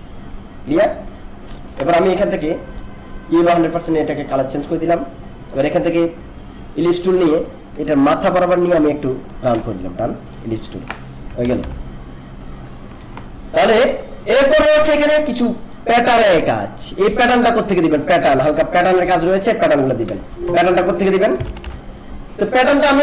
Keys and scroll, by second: 11.4 ctrl+-, 20.2 alt+space.